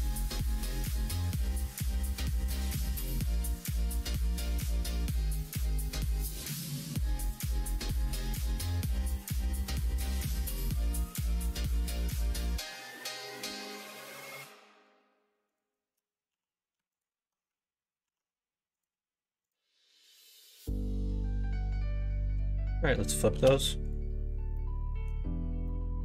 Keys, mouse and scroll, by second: 1.1 click, 1.4 middle click, 3.7-6.5 middle drag, 6.7 middle click, 7.8 f, 8.6 click, 9.3 shift+click, 10.4 f, 11.8 shift+click, 12.9 right click, 13.6 middle click, 14.7 click, 15.4 shift+click, 16.3 f, 16.9 alt+click, 18.0 ctrl+f, 19.4 click, 19.9-21.5 middle drag, 22.3 l, 23.3 shift+n, 23.8 click, 24.5 middle click, 25.6-26.0 middle drag.